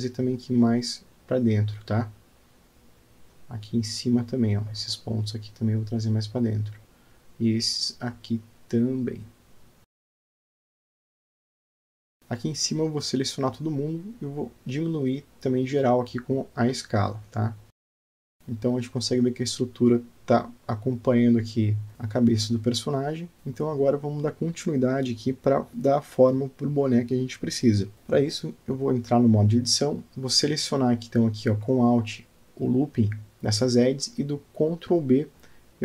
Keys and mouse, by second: 0.4 click, 1.9 g, 6.1 click, 7.0 g, 9.6 click, 10.3 g, 12.2 click, 14.3-15.7 middle drag, 16.6 s, 18.4 Tab, 18.5-19.0 middle drag, 19.0-19.5 drag, 19.5 alt+middle click, 21.6-23.6 middle drag, 24.0-24.3 alt+shift+middle drag, 24.5-24.8 alt+shift+drag, 25.3 ctrl+alt+drag, 25.7 alt+shift+click, 27.3-27.8 alt+middle drag, 30.7 alt+click, 32.0 middle click, 32.8 middle click, 34.2 alt+click.